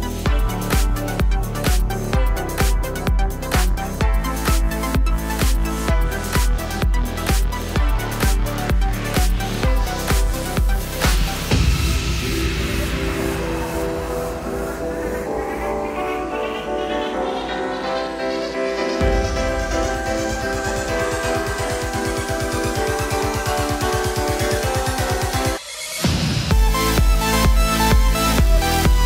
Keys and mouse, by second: 0.4 ctrl+b, 1.3 click, 1.3-2.8 ctrl+middle drag, 1.5 ctrl+b, 2.3 1, 2.8-4.0 alt+drag, 3.1 alt+z, 3.3 r, 4.0 middle click, 4.2 click, 4.3 r, 5.1-9.2 shift+middle drag, 5.8 ctrl+z, 5.9 ctrl+z, 6.0 ctrl+z, 6.9 g, 7.9 g, 9.2 click, 9.3-12.5 middle drag, 9.3 g, 10.0 g, 11.1 g, 12.0 g, 12.5 click, 12.7-26.6 ctrl+middle drag, 12.7 g, 15.5-19.0 typing, 17.4 click, 18.0 click, 18.7 click, 20.1 g, 20.1 g, 21.5 2, 21.6 3, 22.1 2, 23.5 f, 24.6 x, 25.2 KP_7, 25.9 ctrl+KP_2, 26.2 2, 26.2 3, 26.6 shift+click, 26.7-27.9 shift+middle drag, 27.9 shift+click, 28.3 shift+middle click, 29.0 shift+click.